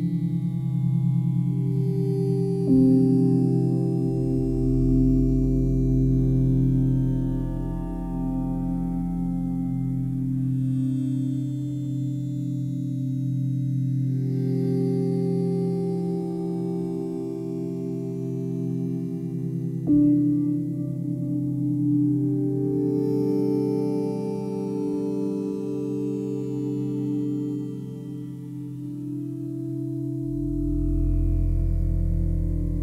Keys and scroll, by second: 3.2 ctrl+z, 4.3 ctrl+z, 32.4 Delete.